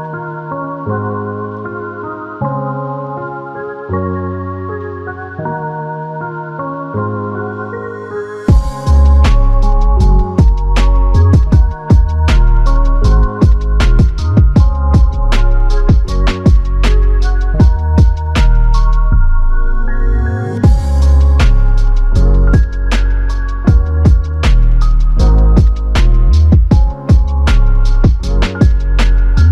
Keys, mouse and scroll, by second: 3.2 click, 3.3 alt+click, 5.3 double click, 14.5 alt+click, 17.8 f, 18.9 double click, 21.6 alt+click, 23.6 alt+click, 25.3 alt+click, 27.2 double click.